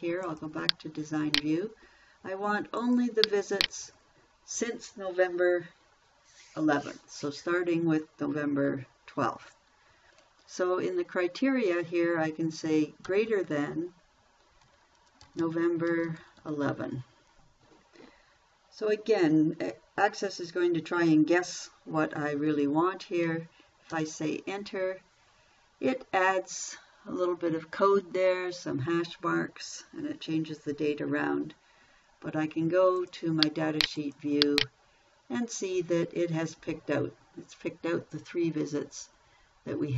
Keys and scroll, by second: 13.4 shift+., 15.0-16.6 typing, 24.3 Return.